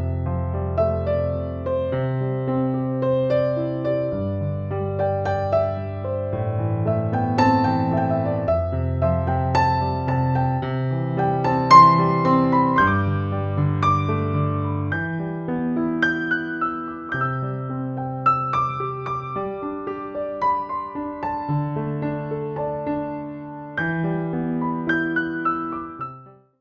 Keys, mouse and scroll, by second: 1.1 click, 3.8-5.0 typing, 5.3 click, 7.9-10.8 drag, 15.7-16.6 drag.